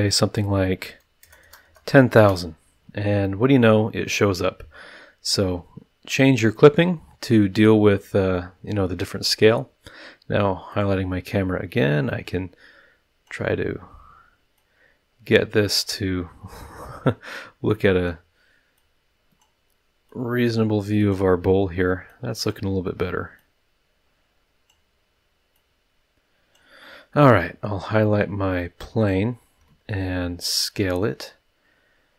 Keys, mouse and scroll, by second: 0.4 KP_1, 0.8 KP_0, 2.1 KP_Enter, 5.0-5.5 scroll down 2, 5.5-6.0 scroll up 4, 6.1 scroll down 2, 7.5-8.1 scroll down 4, 8.3 scroll up 2, 10.7 click, 12.1-13.4 drag, 14.5-15.9 drag, 16.6-17.1 scroll down 2, 17.7-18.2 drag, 18.7-19.6 drag, 20.1-21.3 drag, 22.1-22.7 drag, 23.4-24.9 drag, 25.5-26.7 drag, 29.0 click, 29.6 s.